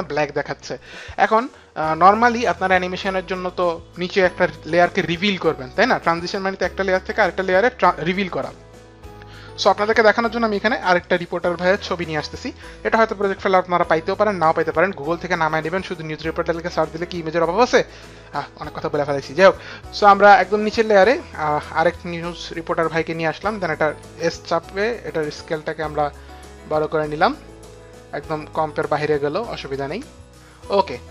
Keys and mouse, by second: 11.1 click, 12.3 click, 18.8 click, 19.8 Delete, 21.2 click, 24.7 s, 26.0 click.